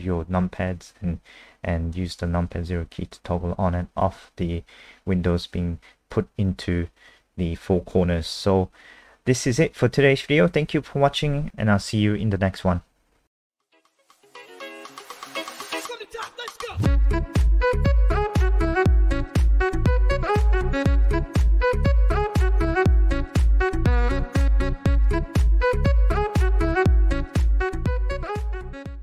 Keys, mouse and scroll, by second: 1.9 click, 3.0 scroll down 1.